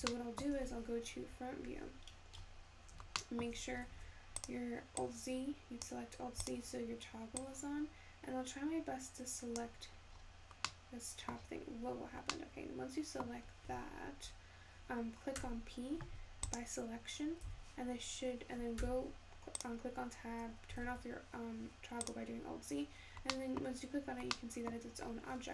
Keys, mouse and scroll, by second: 1.6 `, 18.1 Tab.